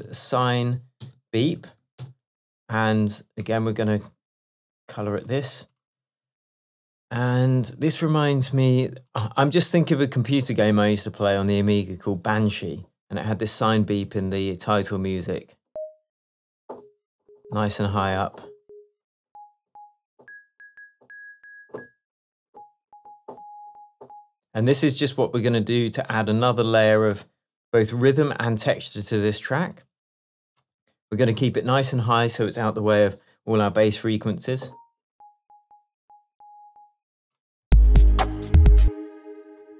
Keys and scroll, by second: 9.7 Down, 31.5 shift+super+m, 37.7 space, 38.9 space.